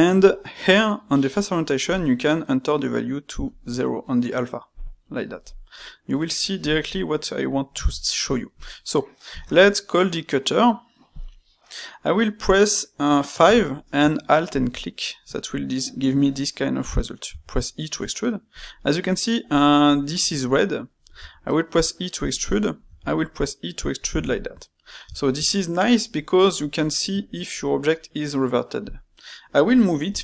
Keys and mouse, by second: 6.6 click, 7.1-9.3 middle drag, 9.3 space, 11.9-14.5 middle drag, 18.7-21.1 middle drag, 21.1 e, 22.5 middle click, 22.8 e, 24.3-28.8 shift+middle drag, 28.8 click, 29.1 middle click, 30.0 g.